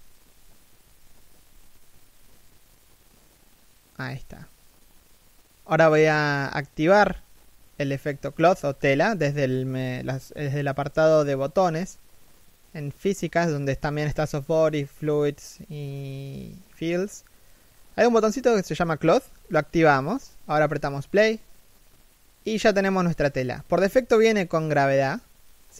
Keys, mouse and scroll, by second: 4.4 right click, 4.6 g.